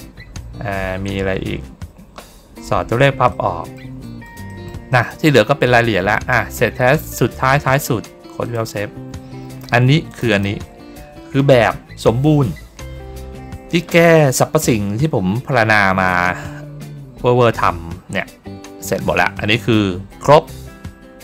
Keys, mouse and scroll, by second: 3.2 middle click, 3.9 middle click, 4.4 middle click, 4.8 middle click, 5.2 middle click, 6.8 click, 8.3 click, 10.0 click, 10.2 click, 18.8 ctrl+middle click, 19.5 ctrl+middle click, 20.0 middle click, 20.1 middle click.